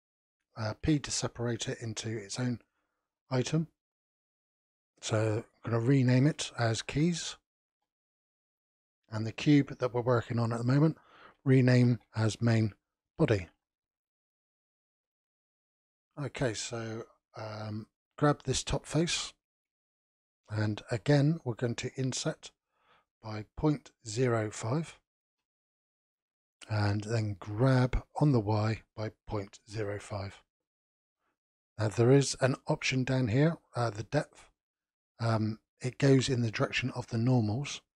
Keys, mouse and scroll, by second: 0.8 p, 4.2 click, 4.4-7.4 drag, 9.1 click, 9.3-12.3 drag, 18.5 click, 19.5 scroll up 2, 20.0-21.8 shift+middle drag, 27.6 g.